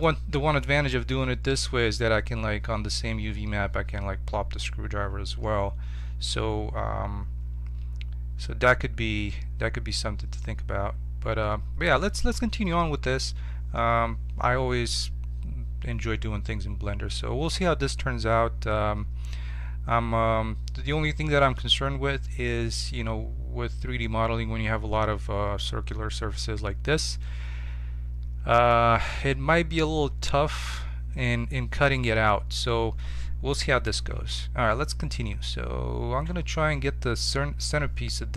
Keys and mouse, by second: 34.1 shift+a.